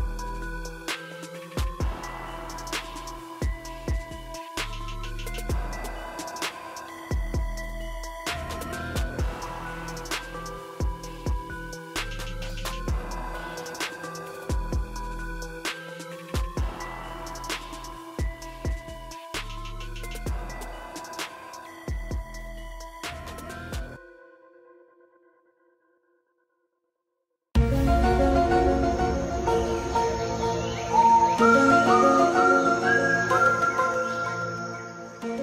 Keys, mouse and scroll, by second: 2.8 typing, 5.9 alt+click, 13.1-14.0 typing, 14.0 click.